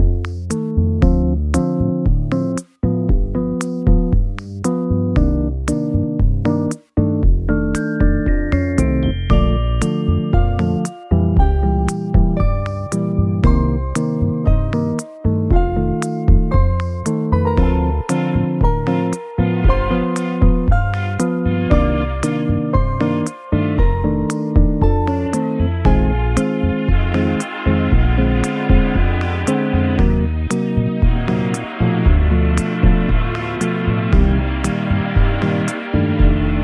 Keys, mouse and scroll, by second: 0.4 scroll down 1, 0.4-2.4 scroll up 2, 2.4 g, 3.2 Escape, 4.3 g, 4.9 Escape, 5.9 g, 6.5 Escape, 8.8 shift+click, 10.7 ctrl+p, 13.9 g, 15.2 Escape, 16.5 g, 17.2 Escape, 18.4 g, 19.4 Escape, 21.0-21.3 scroll down 1, 24.6 g, 25.1 x, 26.8 scroll up 1, 27.0 middle click, 28.1 shift+a, 33.7 Tab, 34.5-34.9 scroll up 1, 34.9 middle click.